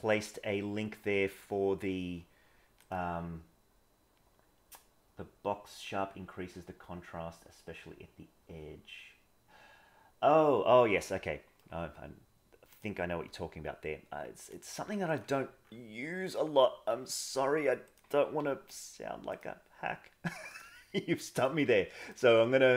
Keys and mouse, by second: 1.3 click, 1.5 g, 11.0 middle click, 12.7 click, 13.2 g, 15.2 g, 16.9 f, 18.4 g, 20.6 g.